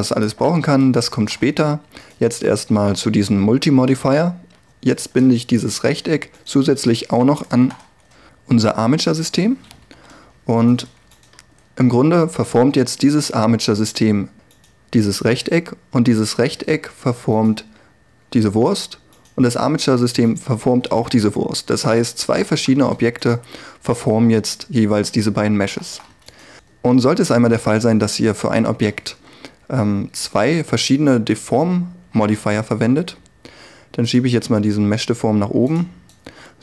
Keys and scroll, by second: 7.7 ctrl+p, 10.0 1.